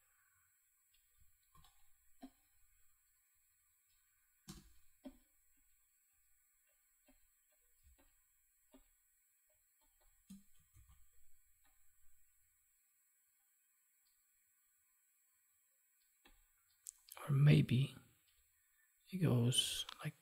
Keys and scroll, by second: 1.4 ctrl+t, 7.7 space, 10.6 ctrl+s.